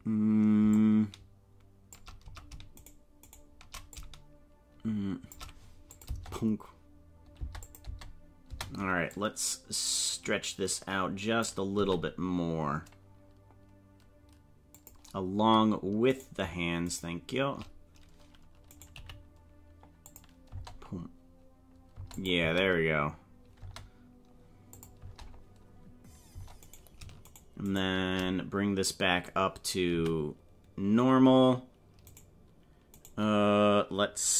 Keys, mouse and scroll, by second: 0.7-2.1 shift+drag, 2.9 shift+right click, 3.5 shift+right click, 3.9-5.4 shift+drag, 6.0 click, 6.1 space, 7.4 space, 7.6 click, 7.8 space, 8.6 space, 9.1-11.4 drag, 11.8 s, 16.2 right click, 18.7 right click, 18.9 g, 20.5 space, 22.0 space, 22.2 click, 22.4 space, 23.8 space, 24.7 click, 25.0 space, 26.4 space, 26.7 right click, 27.4 shift+right click, 28.0 shift+right click, 29.9 a, 32.1 right click, 33.0 right click.